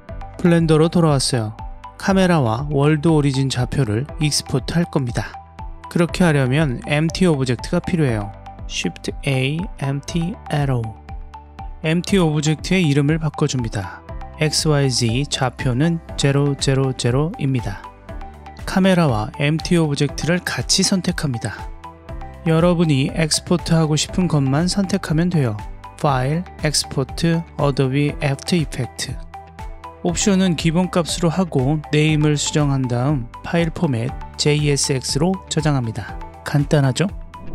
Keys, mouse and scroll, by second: 0.8 click, 2.7 click, 8.0 shift+a, 11.8-12.4 ctrl+drag, 13.1 click, 14.1 click, 15.7-17.4 drag, 18.8 click, 19.9 ctrl+click, 21.0 scroll down 2, 21.1-23.3 middle drag, 24.2-30.1 drag.